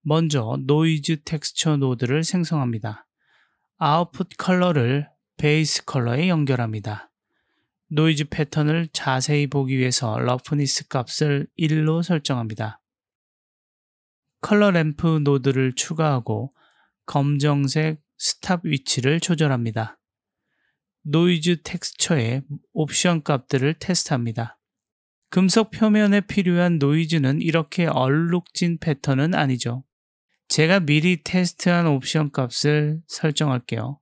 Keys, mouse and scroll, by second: 3.2 click, 5.4-6.1 drag, 9.6 click, 13.2 click, 13.7 click, 14.2 shift+a, 16.3 click, 17.2 click, 18.5-19.2 drag, 21.8 click, 23.1 click, 23.5 click, 24.5 click, 26.2 click, 27.2 click, 28.1 click, 28.6 click, 31.3-32.6 drag, 33.2-34.0 drag.